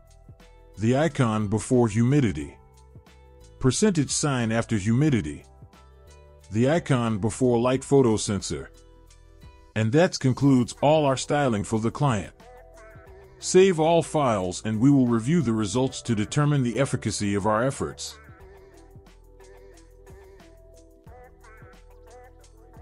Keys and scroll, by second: 0.3 ctrl+z, 3.3 ctrl+z, 5.9 ctrl+z, 9.0 ctrl+z, 12.2 ctrl+s.